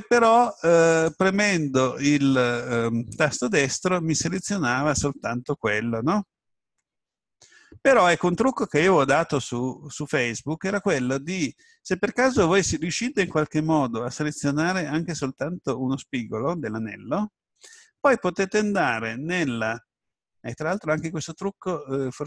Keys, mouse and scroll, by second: 0.9 right click, 19.3-21.2 middle drag.